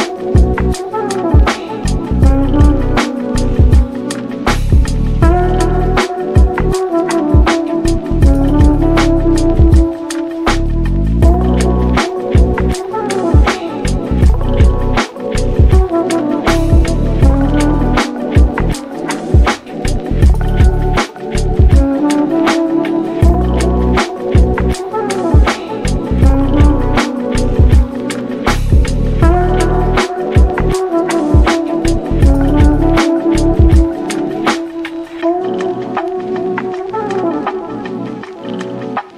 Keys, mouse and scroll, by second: 0.3-0.7 middle drag, 0.7 scroll up 2, 0.8 shift+middle click, 1.1 Tab, 1.4 3, 2.0 2, 2.1 click, 2.4-3.0 middle drag, 3.0 shift+click, 3.2 scroll down 1, 3.3-4.4 shift+middle drag, 4.4 ctrl+b, 5.8 Tab, 6.1-6.6 middle drag, 6.6 scroll down 2, 6.8-8.5 shift+middle drag, 8.5-10.4 drag, 10.7 click, 11.0-11.6 middle drag, 11.6 scroll down 1, 11.7 shift+middle click, 12.1 ctrl+s, 12.5 click, 12.7 scroll up 1, 12.9-13.3 middle drag, 13.3 click, 13.5 scroll up 1, 13.6-14.5 shift+middle drag, 14.5 Tab, 14.8 3, 14.9 click, 15.2 middle click, 16.0 shift+click, 16.5-18.3 middle drag, 18.3 scroll down 1, 18.4 shift+middle click, 19.2 shift+d, 20.0 p, 20.4 Tab, 20.6 click, 20.8 click, 21.0 click, 21.7 Tab, 22.0 middle click, 22.5 1, 22.7 click, 23.3 g, 24.9 shift+click, 25.6 g, 27.3 Tab, 27.5-28.4 middle drag, 28.4 Tab, 28.8 a, 29.0 scroll down 1, 29.2 middle click, 29.6 scroll down 1, 29.8-30.2 shift+middle drag, 30.2 alt+e, 32.7 Tab, 32.9 click, 33.1-33.9 middle drag, 33.9 scroll up 1, 34.1-34.6 shift+middle drag, 34.6 click, 35.2-35.8 scroll up 1, 35.8 g, 36.7 scroll up 1, 36.9-37.2 middle drag, 37.2 click, 37.8 Tab, 38.3 ctrl+r.